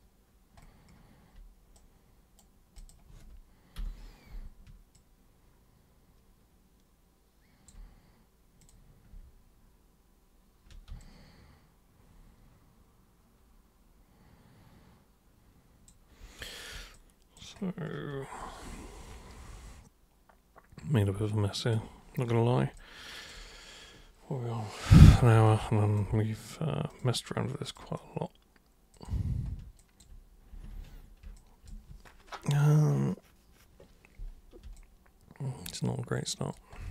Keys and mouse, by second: 1.7 super+right click, 2.7 super+click, 4.9-7.7 alt+super+drag, 8.6 super+click, 11.0-15.8 alt+super+drag, 16.9 alt+super+click, 18.3-21.7 alt+super+drag, 22.8 alt+super+click, 25.4 alt+super+click, 26.8 super+click, 27.6 super+click, 28.9 super+click, 29.8 alt+super+click, 30.7 ctrl+super+1, 31.3 alt+super+click, 34.7-36.5 alt+super+drag.